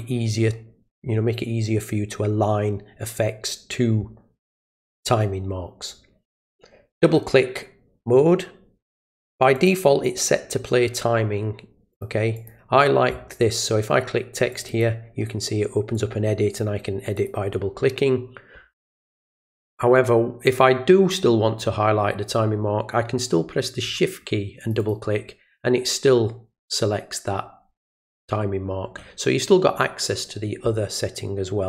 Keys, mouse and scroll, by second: 9.6 click, 11.9 click, 12.4 click, 14.5 click, 14.7 click, 15.9 click, 17.2 click, 24.6 shift+click, 24.8 shift+click.